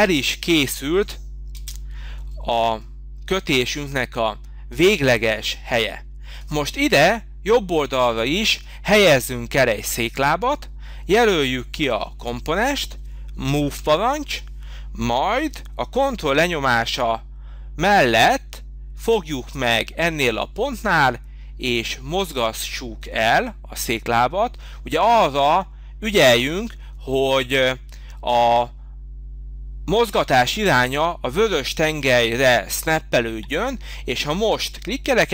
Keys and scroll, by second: 0.0 space, 1.5 space, 14.9 m.